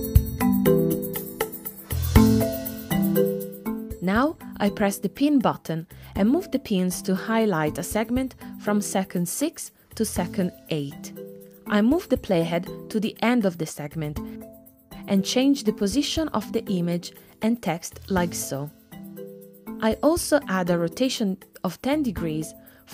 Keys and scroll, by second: 21.6-22.5 typing.